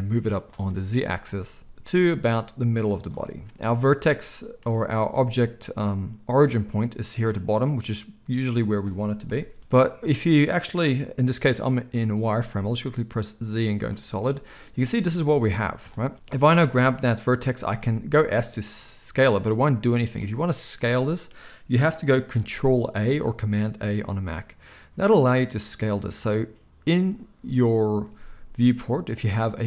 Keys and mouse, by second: 0.4-15.8 shift+middle drag, 1.6 g, 9.2 KP_1, 12.2 z, 15.8-29.6 drag, 17.6 s, 22.9 ctrl+a.